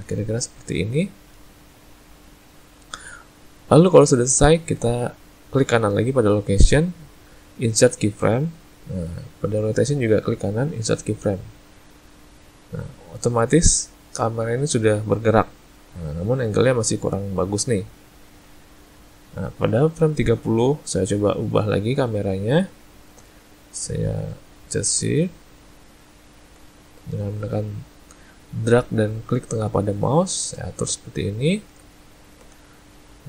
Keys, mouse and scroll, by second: 6.6 right click, 10.1 right click, 13.3 click, 24.7 shift+middle click, 31.0 ctrl+middle click, 32.0 shift+middle click.